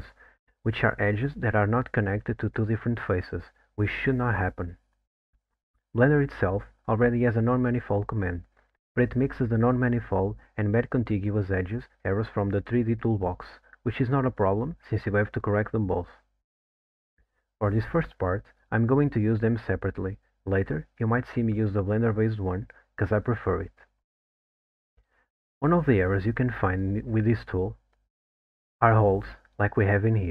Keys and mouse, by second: 12.5 click, 19.7 click, 24.7-27.3 middle drag.